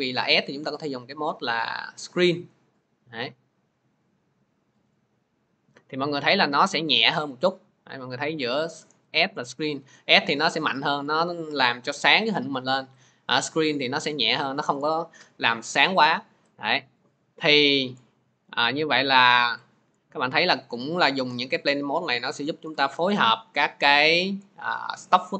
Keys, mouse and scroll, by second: 0.5-18.1 drag, 18.3-20.1 drag.